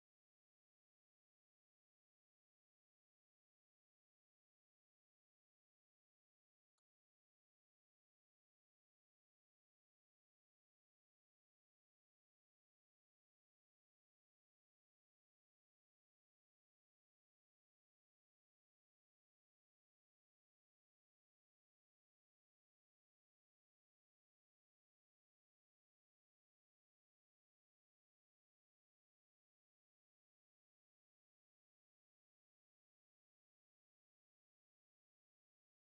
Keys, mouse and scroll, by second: 0.0 click, 0.1 Tab, 0.4 KP_Divide, 0.6 middle click, 0.7 scroll up 4, 1.0 alt+j, 1.2 u, 1.7 scroll up 6, 1.9 Tab, 2.0 middle drag, 2.1 scroll down 2, 2.4 KP_0, 2.8 KP_Divide, 3.1 Tab, 3.6 click, 3.9 scroll down 4, 4.0 scroll up 1, 4.0 a, 4.2 s, 4.8 Tab, 5.0 middle click, 5.2 shift+f, 6.1 ctrl+b, 6.3 z, 7.8 ctrl+alt+b, 8.8 shift+z, 9.3 Tab, 9.4 click, 9.7 scroll down 3, 9.9-10.4 scroll up 3, 9.9 middle click, 10.4 middle click, 11.0 click, 11.7 middle click, 12.0 click, 12.8 middle click, 13.1 click, 13.5 middle click, 13.6 scroll up 1, 13.9 Tab, 14.2-14.9 middle drag, 16.5 middle click, 16.9 scroll up 1, 17.0 middle click, 17.2 Tab, 17.4 click, 17.5 shift+middle click, 17.7 Tab, 17.8 scroll up 1, 17.8 shift+middle click, 18.0 shift+f, 18.5 click, 18.6 middle click, 19.0 click, 19.1 middle click, 19.4 scroll down 1, 19.4 middle click, 19.8 shift+f, 20.4 middle click, 20.6 scroll down 1, 20.7 shift+f, 21.1 shift+f, 21.8 click, 21.9 scroll up 1, 22.0 middle click, 22.1 scroll down 1, 22.2 shift+f, 22.4 shift+click, 22.6 shift+click, 22.9 shift+l, 23.7 ctrl+j, 23.8-24.4 shift+middle drag, 24.4 shift+click, 24.6 ctrl+c, 25.0 shift+middle drag, 25.3 click, 25.7 shift+f, 27.0 click, 27.4 middle click, 27.8 shift+f, 28.7 click, 29.2 click, 29.3 middle click, 30.2 shift+f, 31.4 click, 31.5 Tab, 31.7 scroll up 1, 31.8 scroll down 1, 32.0 a, 32.2 alt+j, 32.5 shift+f, 33.4-34.6 drag, 35.6 click, 35.8 shift+middle click.